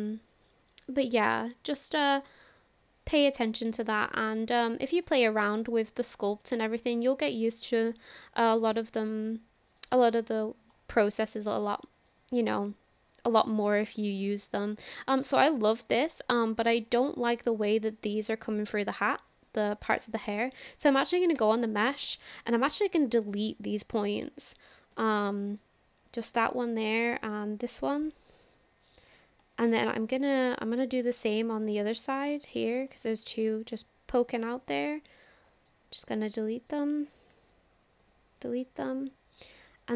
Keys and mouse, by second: 4.8 shift+middle click, 5.2-7.0 middle drag, 8.5 click, 10.1-10.5 middle drag, 10.9 click, 11.8-12.1 shift+drag, 12.3-15.2 drag, 15.6 shift+drag, 15.8 middle click, 16.4 shift+drag, 17.0-17.4 drag, 17.9-18.2 shift+drag, 18.2 middle click, 21.6 Tab, 22.2 shift+middle click, 22.4 shift+click, 23.3 click, 24.1 ctrl+l, 24.9 Delete, 26.5 click, 27.3 ctrl+l, 28.0 Delete, 28.8 Delete, 30.9 shift+middle click, 31.6 middle click, 32.4 shift+middle click, 33.0 middle click, 34.4 ctrl+l, 35.1 Delete, 37.3 ctrl+l, 38.0 Delete, 39.8 shift+middle click.